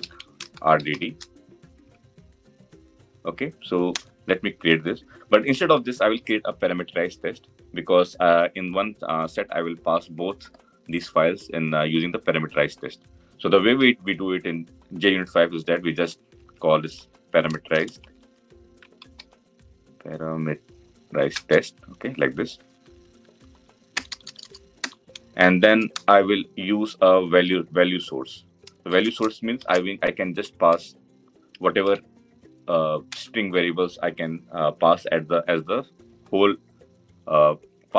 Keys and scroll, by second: 21.4 Return, 33.0 Return.